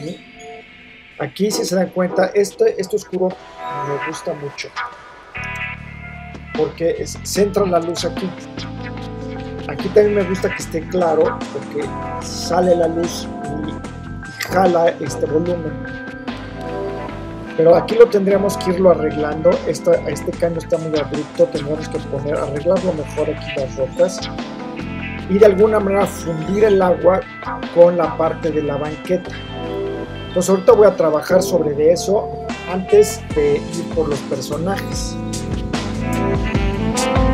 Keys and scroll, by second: 5.5 super+-, 36.9 super+0.